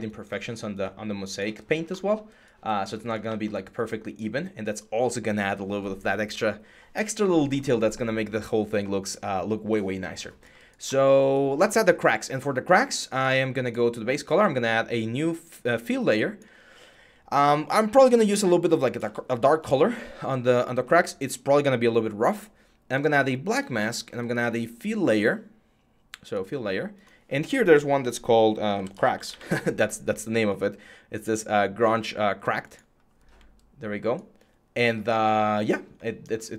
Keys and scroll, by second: 28.3-29.6 typing.